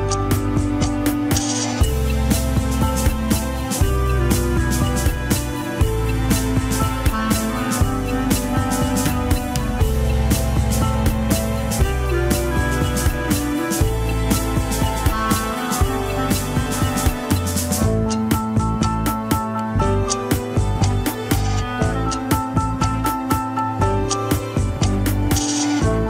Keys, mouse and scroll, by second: 0.4 ctrl+Tab, 0.7 shift+drag, 1.2 ctrl+Tab, 2.0 ctrl+Tab, 2.3 shift+click, 2.6 ctrl+Tab, 4.0 scroll up 1, 4.1 alt+z, 4.8 ctrl+Tab, 5.2 alt+z, 5.5-6.2 shift+middle drag, 6.2 click, 6.6 click, 7.0 shift+click, 7.5 ctrl+Tab, 8.8 ctrl+click, 8.9 alt+z, 9.1 scroll up 1, 9.3 shift+middle click, 9.6 scroll down 1, 9.7 alt+z, 10.0-11.3 middle drag, 11.3-12.9 drag, 12.9 KP_1, 14.1-16.0 drag, 16.0 f, 16.6-17.6 drag, 17.6 middle click, 18.1-19.2 drag, 19.2 middle click, 19.7-20.8 drag, 20.8 middle click, 21.4 click, 21.9 middle click, 22.6 KP_1, 22.9 Tab, 23.1 scroll up 2, 23.3 shift+middle click, 23.9 alt+z, 24.2 scroll down 2, 24.9 alt+z, 25.1 scroll up 2.